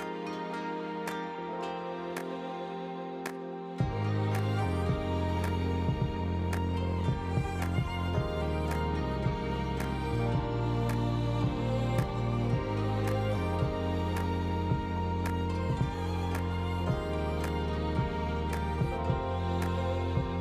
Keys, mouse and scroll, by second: 2.4-3.5 drag, 4.4 shift+click, 5.4 shift+a, 7.4-8.0 drag, 9.1 ctrl+p, 10.9 click, 11.7 r, 13.3 ctrl+s, 13.4 drag, 14.0 shift+a, 16.0 middle click, 16.2 shift+middle click, 16.6 middle click, 17.2 ctrl+z, 17.4 Tab, 17.5 s, 18.6 2, 19.0 click, 19.2 click, 19.5 e.